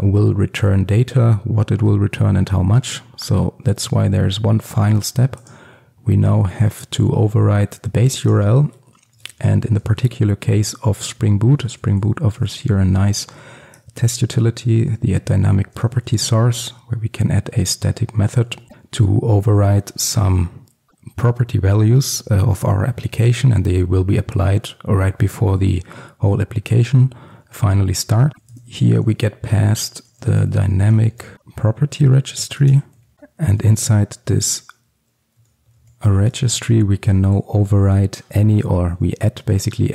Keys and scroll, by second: 13.9 Return, 32.6 Return, 37.2 Return.